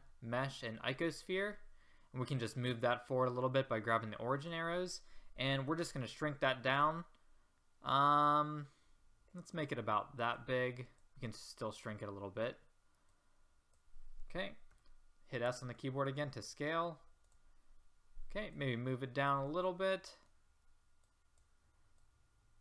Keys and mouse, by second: 5.8 s, 12.8 middle click, 14.1 click, 14.7 s, 18.6-19.7 drag, 21.1-22.6 middle drag.